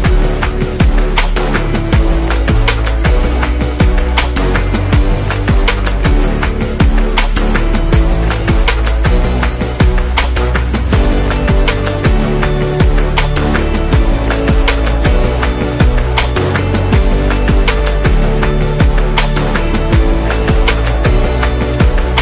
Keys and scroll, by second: 1.4 v, 3.2 super+g, 8.2 BackSpace, 11.1-12.7 typing, 20.3 super+0, 20.8 super+-, 21.6 z.